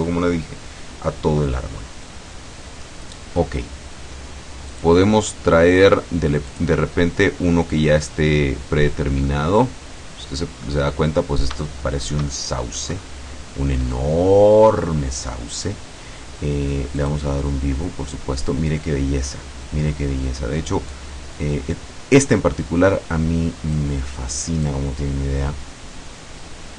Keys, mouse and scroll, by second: 3.4-3.9 scroll down 1, 4.8 click, 6.5 click, 7.7-8.3 scroll down 1, 8.9 scroll down 2, 9.3-10.9 middle drag, 11.7-13.0 shift+middle drag, 17.1 click, 19.8-20.4 scroll down 2, 20.9-24.0 drag, 24.7-26.7 drag.